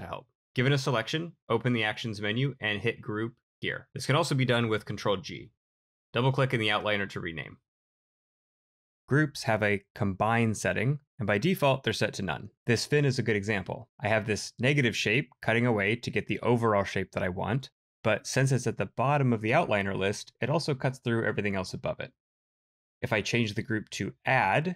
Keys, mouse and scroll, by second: 4.7 ctrl+g, 6.9 double click.